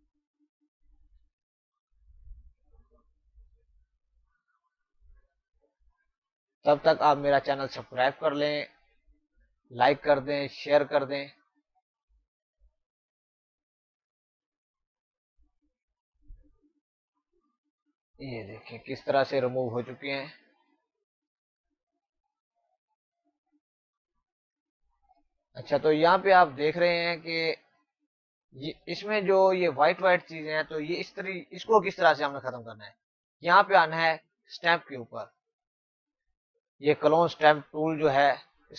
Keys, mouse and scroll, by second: 28.5 space, 34.5 click.